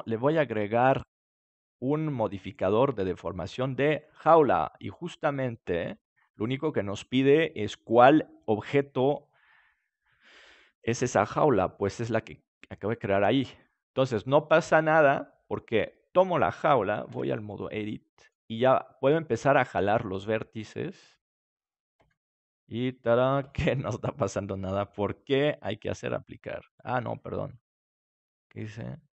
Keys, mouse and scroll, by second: 0.2-2.7 drag, 6.0-7.3 middle drag, 10.7-12.6 drag, 15.4-17.0 right drag, 17.0 Tab, 17.7-19.0 middle drag, 19.0-20.8 right drag, 19.9-21.9 drag, 21.9 Tab, 23.0-25.1 right drag, 25.1 middle click, 26.0-27.7 drag.